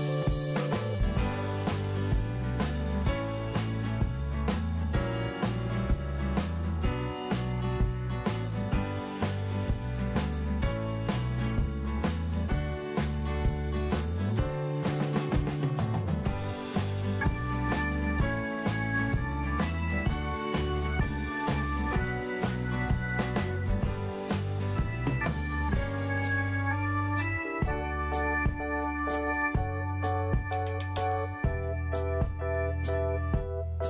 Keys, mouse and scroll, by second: 5.8 scroll up 1, 7.2 click, 14.9-15.3 scroll up 1, 15.3-16.4 scroll down 1, 16.4-17.7 drag, 18.5 8, 20.6-21.7 drag, 23.1 scroll down 1, 23.5 click, 28.6 right click, 29.9 click, 30.4-31.2 scroll down 1, 31.9 click.